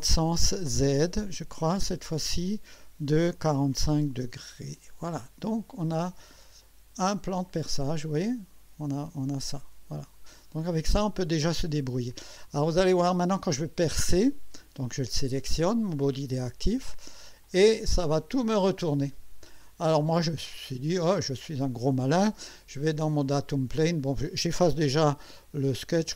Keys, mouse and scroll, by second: 0.7 click, 2.3 click, 3.4-4.4 typing, 6.4-10.6 drag, 12.9 click, 17.4 click, 19.9 click, 25.9 Delete.